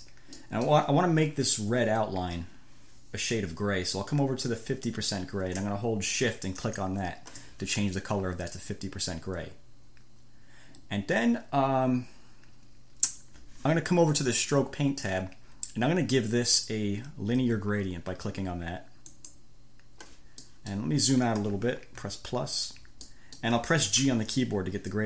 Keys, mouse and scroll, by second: 0.7 middle click, 1.1-2.3 drag, 6.9 shift+click, 8.8 middle click, 9.4 click, 10.1-12.0 middle drag, 12.0 click, 12.2 middle click, 13.1 click, 19.3 click, 20.7 click, 22.2 -, 23.3 click, 24.3 g.